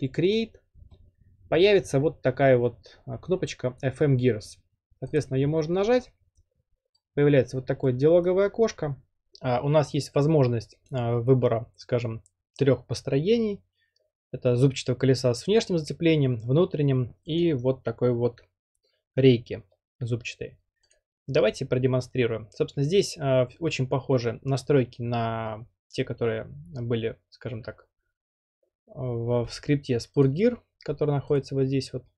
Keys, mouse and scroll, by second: 5.2 click, 8.2-11.9 drag, 17.4 click, 20.9-22.0 drag, 30.2-31.3 drag, 31.4-32.1 drag.